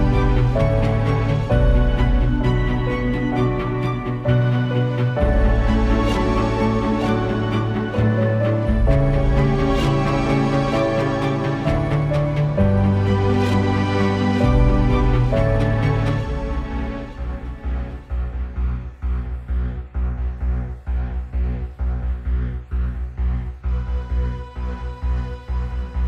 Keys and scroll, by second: 5.2 space, 13.9 space, 14.6 space, 19.0 space, 19.5 space, 20.5 space, 20.9 space, 21.4 space.